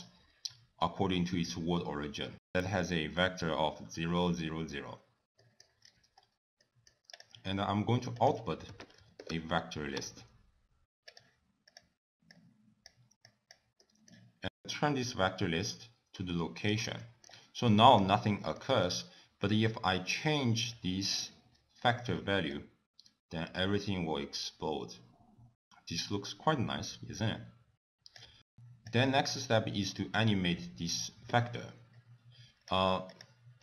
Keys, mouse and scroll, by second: 5.8 middle click, 6.1-6.7 scroll down 5, 6.7 middle click, 7.2 click, 8.2 click, 10.1 BackSpace, 12.3 click, 13.3 click, 13.8 middle click, 14.7 click, 16.9 middle click, 17.7 click, 18.2 middle click, 18.8-19.5 scroll up 3, 19.5 click, 21.5 scroll down 3, 22.5 click, 30.4 click, 30.9 middle click, 31.1-31.5 scroll down 2, 31.5 click, 31.9 click, 32.4 click, 32.8 middle click, 33.1-33.4 scroll up 3, 33.4 click.